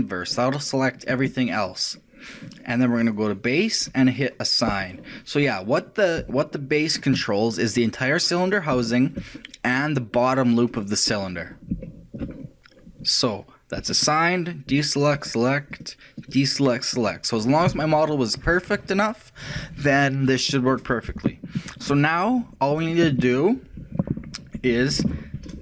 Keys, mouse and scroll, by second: 0.0 click, 3.9-6.5 drag, 6.5-8.8 shift+middle drag, 9.0-13.8 shift+middle drag, 13.8-18.8 shift+drag, 17.7 a, 20.7-25.6 middle drag.